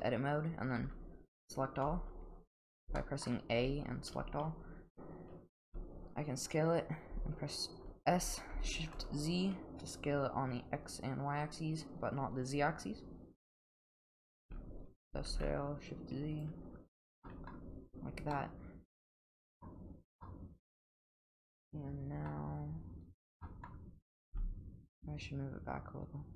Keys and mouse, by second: 0.8 a, 1.8 a, 3.0 shift+middle click, 3.6 a, 4.1 a, 5.7 s, 14.4 s, 16.9 Tab, 17.2 middle drag, 18.3-19.6 middle drag, 20.2-22.3 middle drag, 23.4 middle drag, 24.3 g.